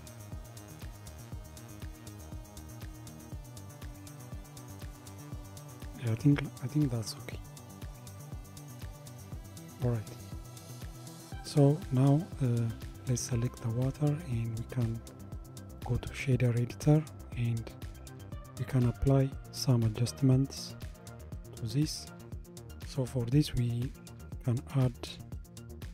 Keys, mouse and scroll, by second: 7.4-7.8 drag, 8.6-9.8 drag, 9.8-12.2 middle drag, 12.2 click, 14.6-18.3 drag, 18.3 n, 19.7 g, 21.6 click, 25.1 shift+a.